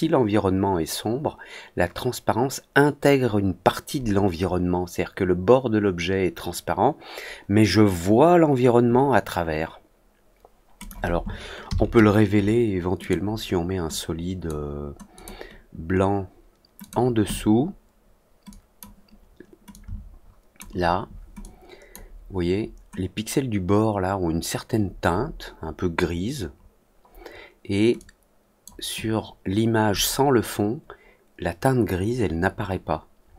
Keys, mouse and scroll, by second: 10.7 click, 12.9 click, 13.8 click, 15.1 click, 16.7 click, 18.4 click, 19.6 shift+click, 21.3 click, 27.9 click.